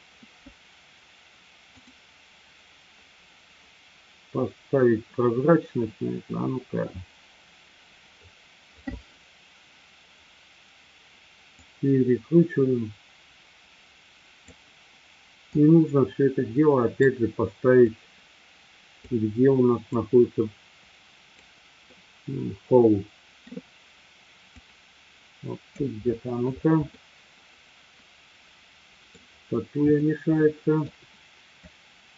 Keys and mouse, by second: 1.9 click, 11.5-14.5 drag, 15.5-17.0 drag, 17.8-18.9 drag, 19.9-21.3 drag, 21.9-23.5 middle drag, 24.7-25.8 drag, 27.0-29.2 middle drag, 29.9-31.1 shift+middle drag, 31.7-32.1 drag.